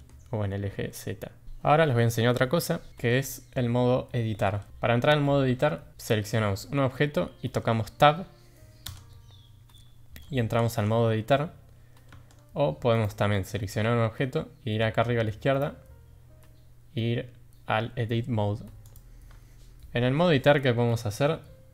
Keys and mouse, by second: 8.9 Tab, 12.1 Tab, 12.9 click, 13.3 click, 15.5-18.9 drag.